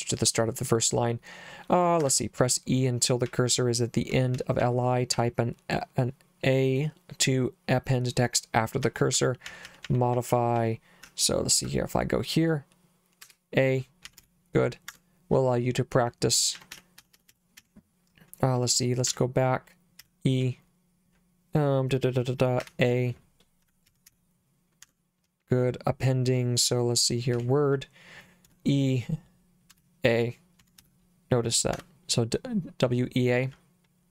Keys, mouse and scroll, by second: 2.0 Escape, 3.3 j, 4.3 j, 4.6 j, 5.1 j, 8.6-11.5 typing, 13.2-14.7 typing, 14.9 Escape, 16.6-17.6 typing, 19.1 b, 20.0 e, 22.6-24.6 typing, 24.8 Escape, 27.3-31.3 typing, 31.7 Escape.